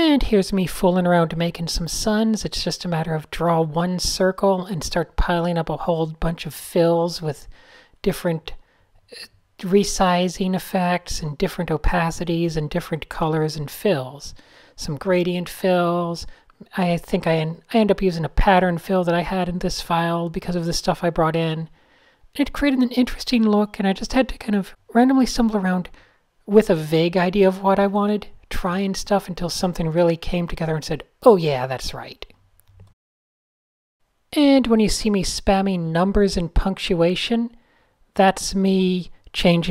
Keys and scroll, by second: 3.8-4.7 typing, 6.3 shift+9, 6.6 shift+8, 7.2 shift+0, 18.6-20.7 typing, 21.7 a, 24.8 super+z, 26.7 a, 28.0 alt+super+o, 30.8-31.6 typing, 34.0 super+z, 34.8-37.3 typing.